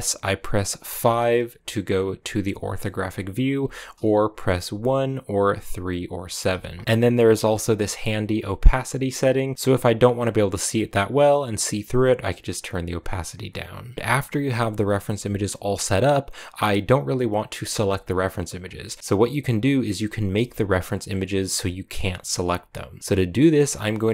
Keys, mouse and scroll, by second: 0.9 KP_5, 2.7 middle click, 3.5 KP_5, 4.6 KP_1, 5.5 KP_3, 6.0 KP_7, 6.4 KP_1, 6.8-9.5 drag, 9.5-10.1 scroll up 3, 11.4-13.9 drag, 13.9 g, 17.6 g, 18.5-19.0 scroll down 1, 19.0-19.7 scroll up 2, 19.7-20.2 scroll up 1, 20.2 g.